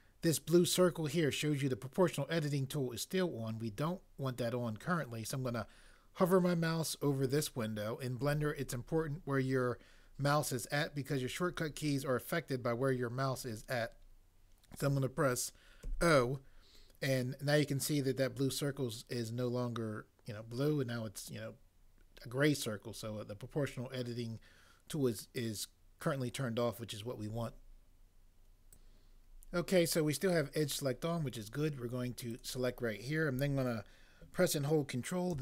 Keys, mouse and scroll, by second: 15.8 o, 35.3 ctrl+space.